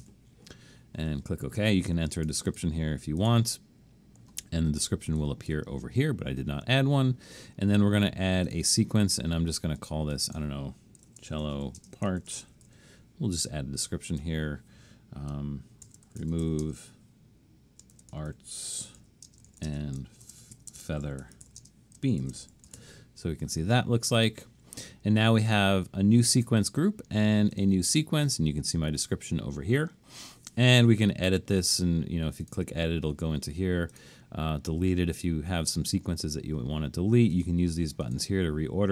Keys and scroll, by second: 0.0-0.5 typing, 11.1-13.2 typing, 15.6-23.3 typing.